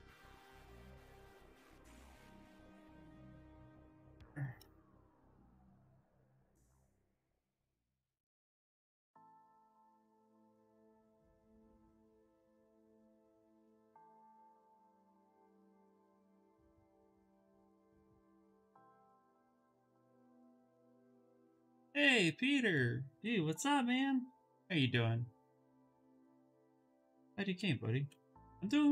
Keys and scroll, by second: 9.5 b, 10.3 s, 11.9 s, 12.7 shift+d, 15.2 2, 16.6 s, 27.2 s.